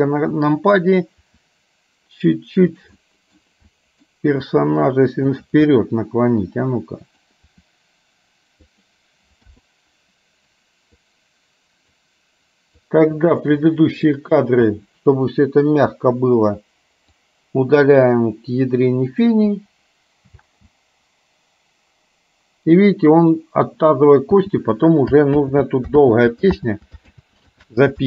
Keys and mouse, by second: 1.2 r, 3.1 middle click, 3.7 middle click, 4.4 r, 5.7-7.2 middle drag, 7.6 r, 9.6 i, 11.2-12.2 drag, 12.8-14.2 drag, 14.8 Delete, 17.2-19.3 drag, 19.7 Delete, 20.4 space, 24.4 space, 25.4 ctrl+z, 26.1 ctrl+z, 26.7 ctrl+z, 27.2 ctrl+z, 27.7 ctrl+z.